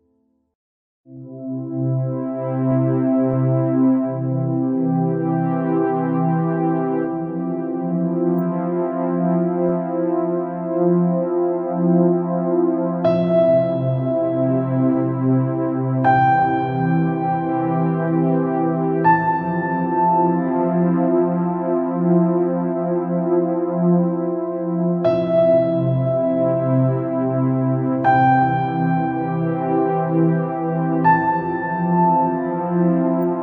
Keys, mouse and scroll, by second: 0.1-0.8 scroll up 2, 5.3-6.7 drag, 6.7-7.4 scroll up 5, 7.4-8.0 scroll up 3, 8.0-8.4 scroll down 3, 8.4-8.8 scroll up 3, 9.0-9.3 scroll up 3, 9.3 scroll down 4, 9.8 middle click, 10.7-11.0 scroll up 4, 11.0 scroll down 2, 11.2-12.4 middle drag, 12.4-12.8 scroll up 4, 13.0 scroll down 1, 13.2 middle click, 14.0 scroll down 1, 14.4-17.4 middle drag, 17.8-18.2 scroll up 2, 18.3-18.6 scroll down 1, 18.6 middle click, 19.5 scroll up 1, 20.0 click, 23.6-25.3 middle drag, 25.3 click, 31.3 shift+click, 31.8 shift+click, 32.5 shift+click.